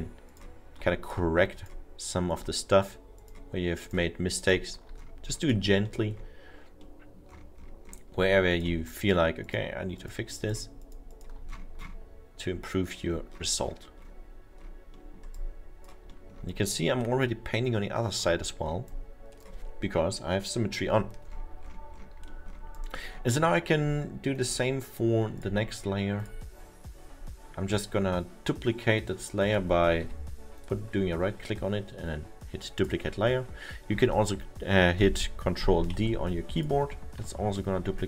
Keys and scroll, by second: 30.1 Delete, 35.9 ctrl+d, 37.2 Delete.